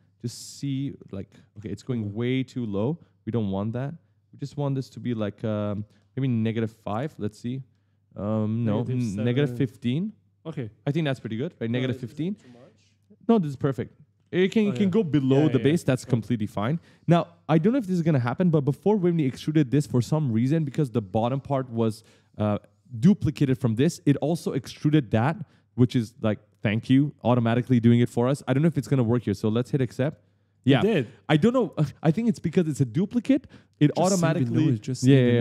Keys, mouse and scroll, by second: 0.3 right click, 3.2 click, 5.4 click, 9.3 5, 10.7 right click, 11.3-14.7 typing, 16.5 right click, 16.8-18.7 typing, 29.8 click.